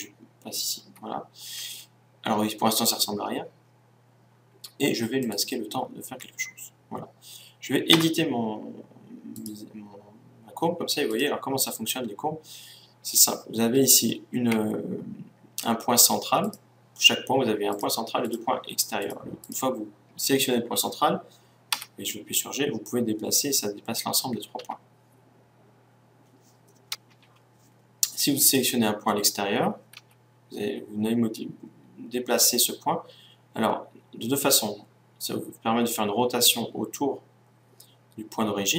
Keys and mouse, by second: 1.2 Tab, 5.1-6.9 drag, 8.1 Tab, 9.8-13.3 right drag, 16.4-21.3 right drag, 22.1 g, 28.2-30.8 drag, 30.2 g.